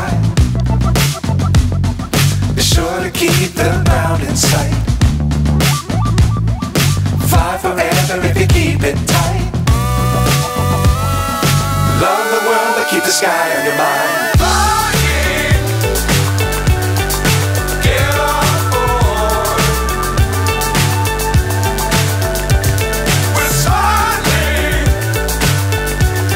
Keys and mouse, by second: 0.0 click, 1.7 click, 5.2-6.7 drag, 9.2-11.3 drag, 16.5-22.8 drag, 24.0 click.